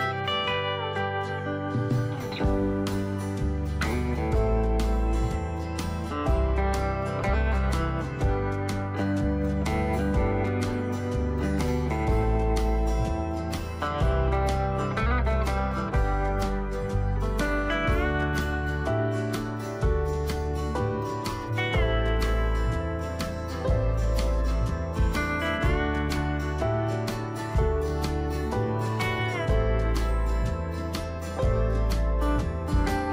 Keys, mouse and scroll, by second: 1.8 click, 10.6 right click, 12.0 click, 16.3 shift+click, 19.5 shift+click, 21.5 click, 27.1 right click, 29.1 click, 32.6 Delete.